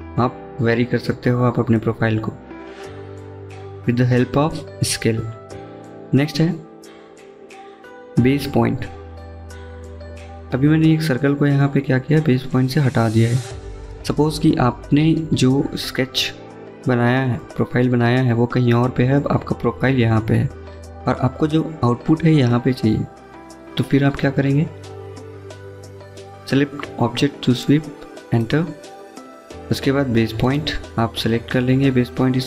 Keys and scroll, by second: 15.0-15.8 typing.